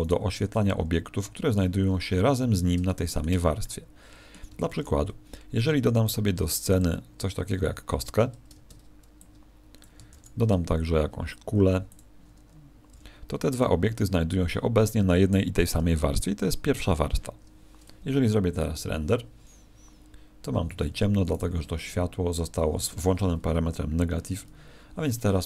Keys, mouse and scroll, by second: 0.5 middle click, 1.8-2.8 scroll up 10, 2.8 shift+middle click, 3.4 scroll up 1, 3.5 middle click, 5.4 shift+a, 8.5 ctrl+space, 9.1 click, 12.9 g, 13.5 click, 20.5 Escape, 21.3 right click, 22.7 click.